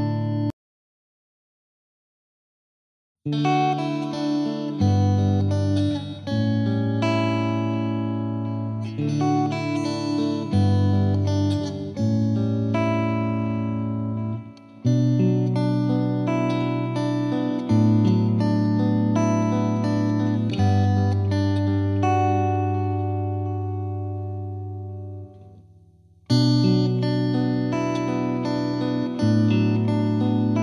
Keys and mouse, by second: 0.2 click, 0.5-1.9 drag, 2.4 click, 2.8 click, 3.2 Delete, 4.4 click, 4.5 click, 5.2 click, 5.7 Delete, 6.2 click, 6.2 click, 7.8 click, 7.9 click, 9.2 F2, 9.5 click, 10.0 click, 11.1 click, 11.6 click, 12.0 click, 12.5 click, 12.8 click, 14.2 click, 14.9 click, 15.5 click, 16.2 click, 16.8 click, 17.4 F2, 17.5 click, 18.1 click, 18.6 click, 19.3 click, 20.3 click, 20.9 click, 21.8 click, 22.3 click, 22.5 click, 22.9 right click, 23.4 F3, 23.5 F3, 24.2 click, 24.4 click, 25.0 click, 26.1 Escape, 26.5 click, 27.1 F3, 27.5 click, 28.3 F2, 28.8 click.